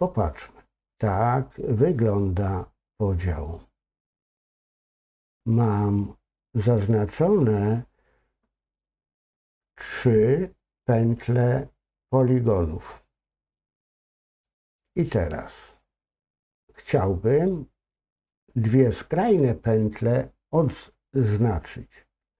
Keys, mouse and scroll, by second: 0.4-1.1 scroll up 2, 1.1-6.7 middle drag, 6.7-10.0 scroll up 2, 15.0-15.8 scroll down 2, 15.8-17.1 scroll up 2, 17.1-20.7 scroll up 1, 22.2 scroll down 1.